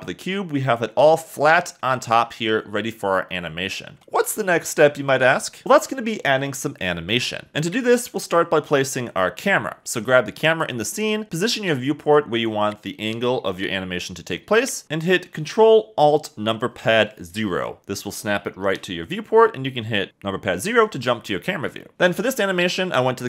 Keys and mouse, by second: 0.4 a, 0.6 a, 4.0 Escape, 4.4 click, 5.7-6.9 drag, 6.9 KP_1, 10.4-11.7 shift+middle drag, 11.7 KP_1, 12.2 middle click, 18.6 ctrl+alt+KP_0, 21.4 click.